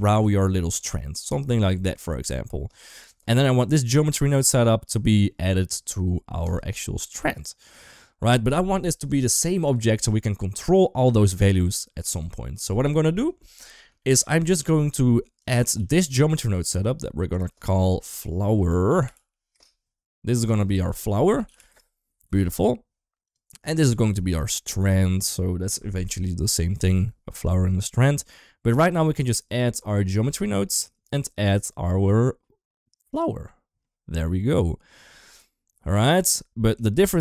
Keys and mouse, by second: 0.0 click, 1.5 Tab, 6.2 click, 13.8-14.2 shift+middle drag, 15.2 click, 15.6 ctrl+s, 16.2 middle click, 17.1-19.3 drag, 20.3-21.5 drag, 22.1 ctrl+s, 23.0 click, 24.0-24.3 shift+middle drag, 29.4-30.2 drag, 30.7-33.1 drag, 36.8 shift+a.